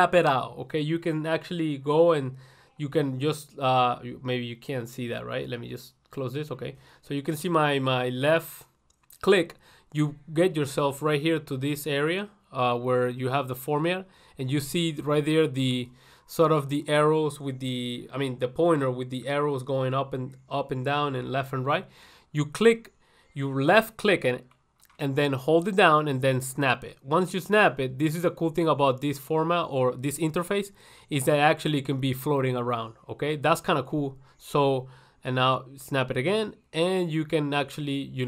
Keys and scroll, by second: 5.8 ctrl+1, 15.8 ctrl+1.